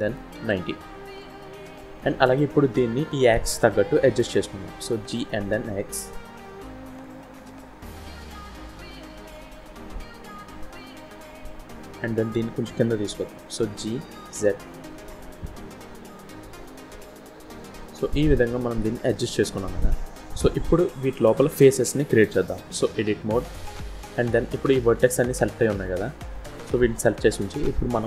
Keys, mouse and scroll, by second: 4.9 g, 7.2-7.6 scroll up 3, 7.7 shift+middle click, 8.5 scroll up 2, 8.8 shift+middle click, 10.9-11.6 scroll down 2, 13.6 g, 16.0-16.7 scroll down 2, 17.3 scroll down 1, 18.0-18.3 scroll down 1, 18.3-18.8 scroll up 1, 19.0 shift+middle click, 19.9 scroll down 1, 22.9 Tab, 23.9 scroll down 1, 25.3 click.